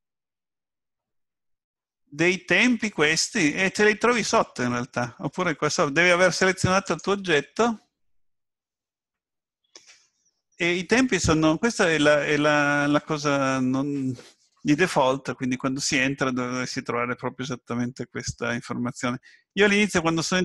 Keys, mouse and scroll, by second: 6.9 click, 19.7 click.